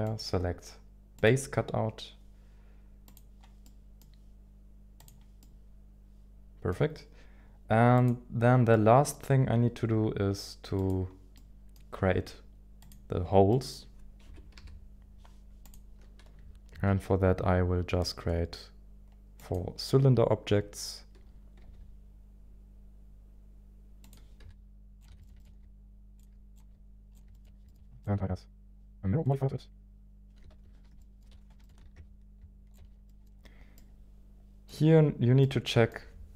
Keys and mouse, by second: 3.0 click, 3.6 middle click, 5.0 click, 5.4-6.8 middle drag, 7.9 click, 8.7 middle click, 10.7 click, 11.3-12.8 middle drag, 12.8 click, 13.5 middle click, 14.2 KP_1, 14.5 KP_7, 16.7 shift+a, 21.6 g, 24.0 click, 24.4 g, 25.0 click, 25.0 s, 25.2 shift+middle click, 25.4 shift+middle click, 26.1 g, 26.2 click, 26.5 click, 26.5 s, 27.1 g, 27.3 shift+middle click, 27.7 shift+middle click, 30.5 ctrl+z, 31.0 middle click, 31.5 KP_1, 31.6 shift+middle click, 31.7 g, 31.8 z, 32.7 ctrl+shift+click, 33.0 middle click, 33.8 middle click, 35.4 middle click.